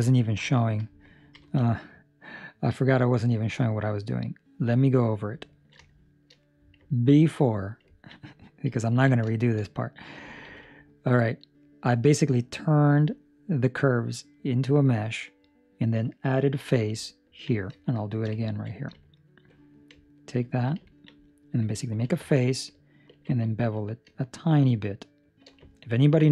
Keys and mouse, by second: 1.4 ctrl+alt+shift+5, 3.6 middle click, 4.8 middle click, 5.6 ctrl+middle click, 5.7 ctrl+middle click, 5.8 shift+middle click, 6.2 shift+middle click, 6.4 middle click, 6.9 ctrl+middle click, 7.5 right click, 8.0 ctrl+middle click, 8.8 ctrl+middle click, 9.2 shift+middle click, 9.5 shift+middle click, 10.4 Tab, 17.0 ctrl+middle click, 17.8 shift+middle click, 18.4 ctrl+middle click, 19.2 alt+right click, 20.4 alt+right click, 20.8 ctrl+middle click, 21.9 f, 23.1 ctrl+b, 25.7 ctrl+middle click.